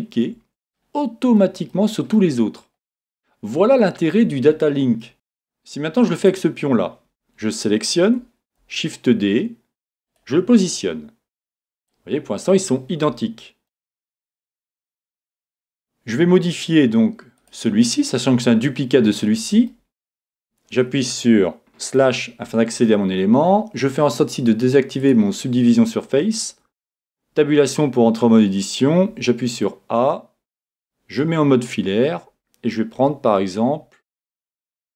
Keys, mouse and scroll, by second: 5.4-6.5 middle drag, 5.4 KP_7, 6.5-8.6 right drag, 8.6 shift+d, 10.2-12.0 drag, 10.6-11.9 middle drag, 12.0-14.9 middle drag, 16.3-18.2 scroll up 1, 17.4-19.4 right drag, 18.2 scroll up 1, 19.7-21.7 middle drag, 21.7 KP_Divide, 25.0-26.8 drag, 26.9 Tab, 29.1 a, 29.7-33.7 middle drag, 31.2 z, 33.4 b.